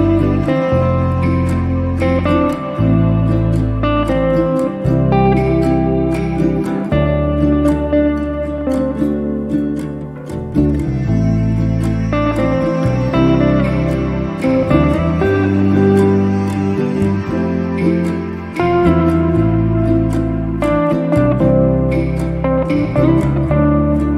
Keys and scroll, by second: 5.0 5, 5.5 Return, 6.0 space, 9.0 m, 16.6 5, 16.9 0, 17.1 Return, 17.6 space.